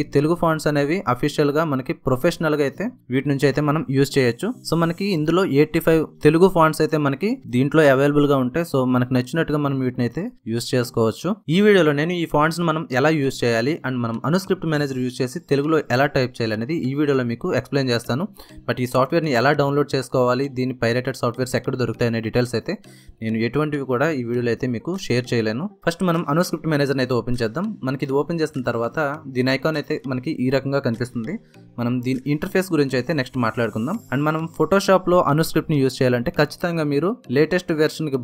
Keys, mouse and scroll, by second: 25.7 click, 26.6 click, 34.3 click, 34.4 click, 36.9 click.